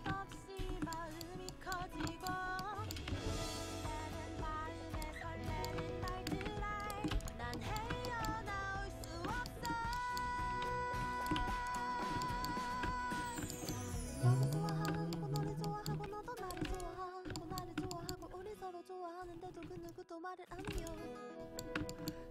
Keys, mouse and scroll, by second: 0.7 shift+h, 1.9 a, 3.4 alt+z, 5.5-7.9 drag, 7.2 x, 11.5 x, 12.1-13.5 right drag, 13.5 middle click, 14.5 right click, 16.8 x, 20.8 x.